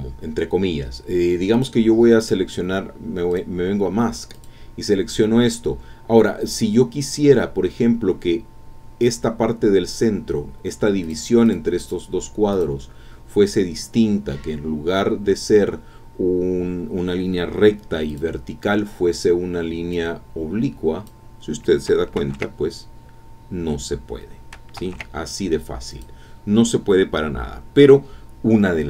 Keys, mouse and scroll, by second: 1.5 click, 2.2 click, 3.3 click, 4.3 click, 11.0 click, 11.4 click, 11.8 click, 12.5 click, 18.1 click, 19.9-21.3 drag, 22.2 ctrl+z, 24.8 ctrl+z, 25.9 click.